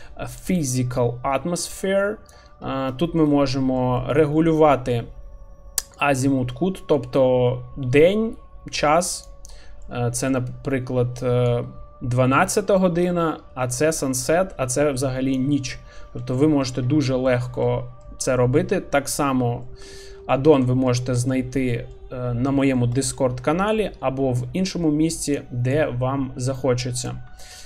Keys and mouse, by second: 3.0 shift+middle click, 3.4 middle click, 4.1 shift+middle click, 4.5 middle click, 6.0-9.3 drag, 9.9-10.3 middle drag, 11.4-15.3 drag, 15.8 middle click, 16.5 shift+middle click, 17.3 shift+middle click, 17.6 middle click, 18.4 shift+middle click, 19.6 middle click, 20.2 shift+middle click, 20.5 middle click, 21.1 shift+middle click, 21.8 middle click, 22.6 shift+middle click, 23.7-25.4 drag, 25.7-27.1 drag, 27.4 shift+middle click.